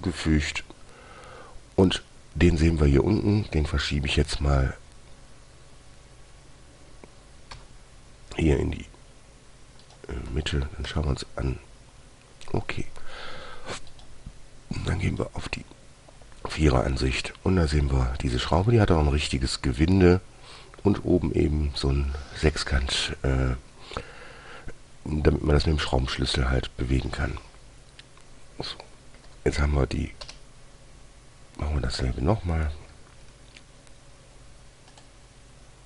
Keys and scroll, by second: 4.6 f, 7.9 g, 11.2 1, 29.6 Delete, 30.6 Return.